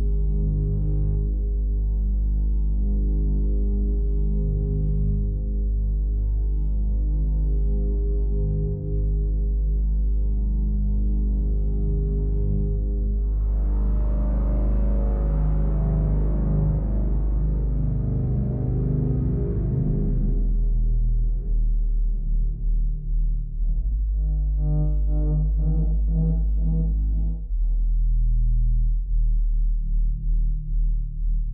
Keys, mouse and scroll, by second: 6.4 click, 7.7 click, 8.8 click, 14.1 click, 16.1 click, 18.6 click, 19.2 click, 20.7 click, 27.1 click, 28.1 click, 28.8 click.